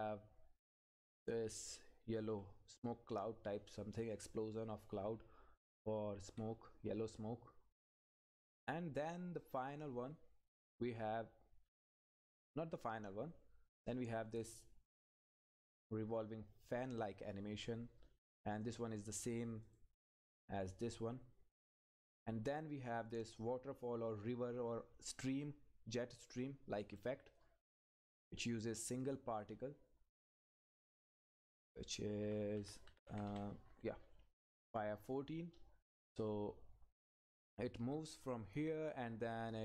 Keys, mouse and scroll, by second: 4.0 click, 4.3 Left, 6.5 Down, 6.6-7.4 scroll down 2, 7.0 Down, 9.4 click, 9.7 Up, 14.4 click, 18.2 click, 22.1 Up, 27.8-29.0 scroll down 1, 29.0 click, 30.8-31.5 scroll down 1, 31.5 click, 32.2 Up, 35.2-35.7 scroll down 1.